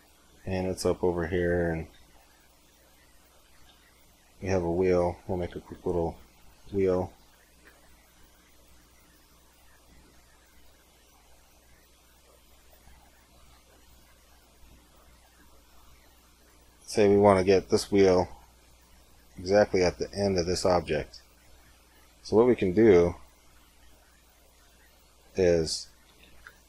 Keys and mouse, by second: 1.8 shift+a, 3.5 shift+a, 6.2 r, 8.0 s, 11.7 s, 13.3 s, 15.1 g, 19.8-25.1 middle drag, 25.1 Tab, 25.9 a, 26.3 c.